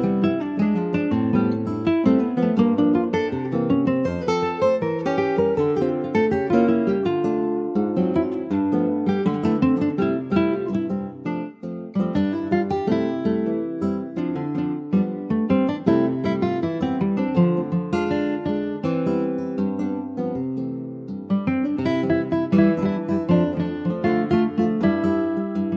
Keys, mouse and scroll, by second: 1.0 Tab, 1.3 click, 1.5 scroll down 3, 1.8 middle click, 2.1 click, 2.3-5.0 right drag, 5.0 click, 5.4 click, 5.8 ctrl+s, 5.9 scroll down 2, 6.2 shift+middle click, 6.3-7.2 shift+scroll up 3, 6.5 middle click, 7.2 ctrl+s, 7.3-8.5 middle drag, 8.5 ctrl+s, 8.5 click, 9.0 scroll up 3, 9.3 shift+middle click, 9.9 Tab, 10.0 click, 11.2 3, 11.4 click, 12.1 middle click, 12.3 ctrl+s, 12.5 click, 13.3 click, 13.8 alt+middle click, 14.5 alt+z, 16.9-17.8 scroll up 2, 17.8 middle click, 18.5 click, 19.0 ctrl+z, 19.1 click, 19.4-19.8 scroll down 3, 20.1 alt+z, 20.7 middle click, 21.3 click, 21.7 shift+click, 22.0 shift+click, 23.5 ctrl+j, 23.8 click, 24.3 click, 24.8 alt+middle click, 25.4 alt+middle click.